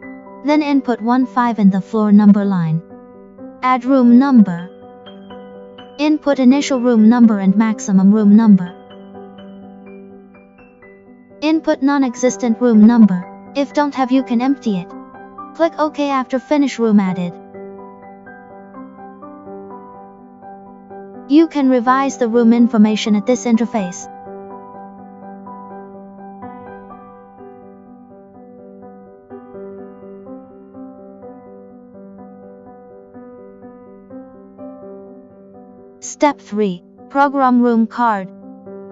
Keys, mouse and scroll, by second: 4.8 click, 17.4 click, 18.8 click, 19.9 click, 21.4 click, 24.8 click, 25.0 click, 29.8 click, 30.7 click, 32.6 click, 35.2 click.